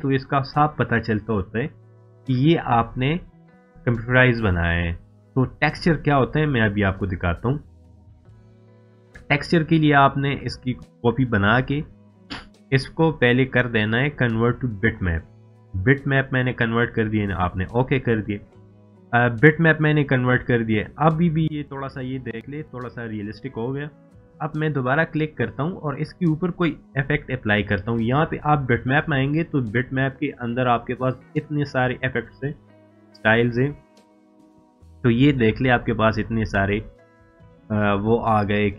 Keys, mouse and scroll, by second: 1.2 scroll up 1, 2.5 scroll down 1, 5.5 scroll down 1, 6.1-6.9 scroll up 1, 6.9-7.5 scroll down 1, 8.2 click, 8.3-10.2 drag, 14.3 click, 18.7 scroll up 1, 19.2-19.8 scroll up 1, 19.8 scroll down 1, 20.4-20.9 scroll down 1, 21.0 scroll up 1, 21.7 scroll up 1, 22.1 scroll down 1, 24.9 click, 25.0 click, 29.9 click.